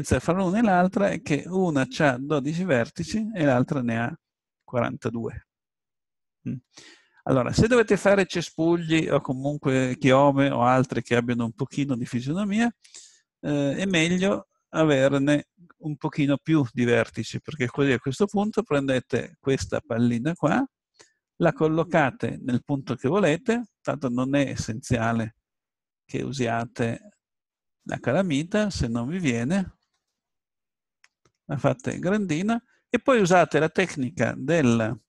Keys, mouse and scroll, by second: 13.9-15.9 drag, 18.4 g, 20.5 click, 20.8-22.4 middle drag, 25.5-26.7 middle drag, 26.7 s, 28.5-30.0 middle drag, 29.8 s, 33.2 a, 34.6-35.0 drag.